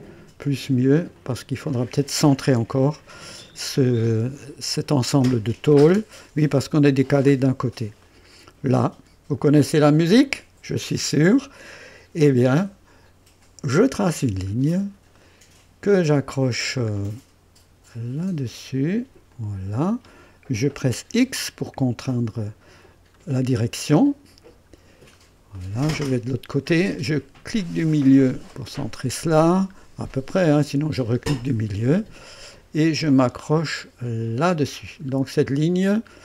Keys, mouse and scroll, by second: 1.1 click, 1.7 click, 2.7-4.6 typing, 3.5-3.8 scroll up 1, 4.1-5.0 right drag, 5.1-5.4 scroll down 1, 5.9-6.4 scroll up 2, 7.4 scroll down 2, 8.0-8.8 right drag, 9.8 scroll up 1, 11.1 scroll up 1, 11.6-12.3 right drag, 13.8 click, 14.5-14.8 scroll up 1, 15.1 right click, 16.8 scroll up 1, 19.3 click, 21.1 x, 21.9 right click, 23.1-23.5 scroll down 1, 23.9 right click, 24.5-25.3 scroll down 2, 25.5-26.3 right drag, 28.0 middle click, 28.8-29.7 scroll up 2, 30.8 middle click, 31.5 scroll up 1, 32.1 right click, 32.2 typing, 34.2 click, 34.5 typing, 35.0-36.1 scroll down 3.